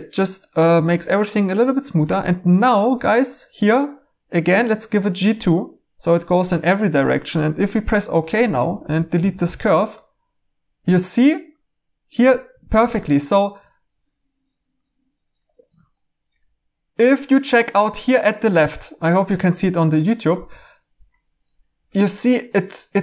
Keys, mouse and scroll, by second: 8.2-9.8 typing.